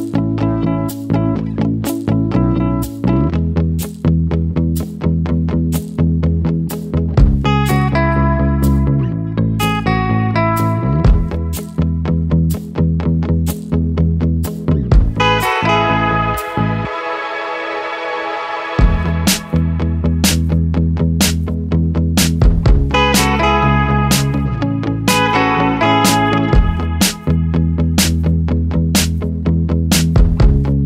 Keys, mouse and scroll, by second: 0.6-1.1 scroll up 1, 1.1 ctrl+KP_1, 1.9-2.3 scroll up 2, 2.3 click, 2.4 Tab, 3.2 click, 4.2 click, 6.3 scroll down 2, 6.6 alt+a, 6.9 Tab, 7.0 scroll down 1, 7.1-9.4 middle drag, 9.4 scroll up 2, 12.0-14.9 drag, 15.8-16.6 scroll down 1, 16.6 scroll down 2, 16.7-17.8 middle drag, 17.8 scroll up 4, 18.1 Tab, 19.5 click, 21.4 Delete, 21.8 scroll down 1, 22.0 middle click, 22.4 Tab, 22.8-23.7 scroll down 1, 23.8 KP_1, 24.3-25.0 scroll up 2, 25.0 Tab, 25.8-26.2 scroll down 1, 26.2-26.7 scroll up 2, 26.7 Tab, 27.1 Tab, 28.7 click, 29.4 alt+a, 29.8-30.6 scroll down 1, 30.6 click.